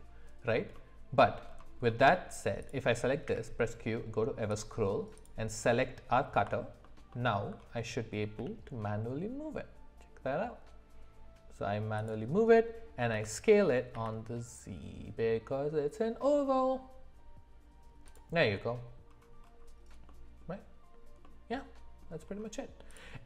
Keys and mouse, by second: 0.7 middle click, 1.9 middle click, 2.6 click, 3.2 q, 6.8 alt+middle click, 7.1 alt+middle click, 8.4 g, 13.1 s, 20.0-20.4 middle drag, 21.2 middle click.